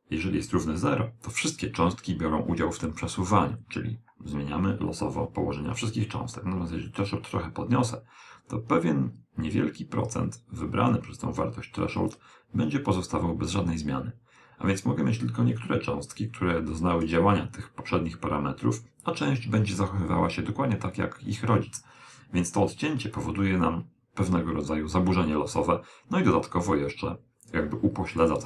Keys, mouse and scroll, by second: 4.4 click, 20.5 click, 27.8 click.